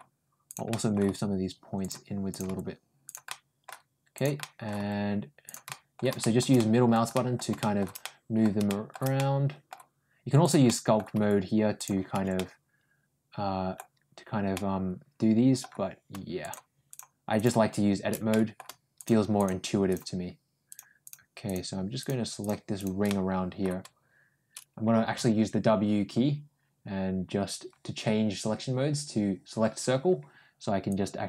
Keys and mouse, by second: 0.5 middle click, 0.9 g, 2.1 click, 2.3 g, 3.1 middle click, 4.2 middle click, 4.6 g, 5.5 middle click, 6.0 middle click, 6.4 middle click, 7.0 middle click, 7.4 middle click, 7.8 middle click, 8.5 shift+middle click, 9.0 middle click, 10.2 click, 10.5 middle click, 11.2 g, 12.2-13.6 middle drag, 14.4-15.4 middle drag, 16.3 shift+click, 16.7 shift+click, 18.1 middle click, 18.8 shift+click, 19.7 shift+click, 20.5 shift+click, 21.3 shift+click, 21.9 shift+click, 22.9 middle click, 25.0 w, 30.7 click.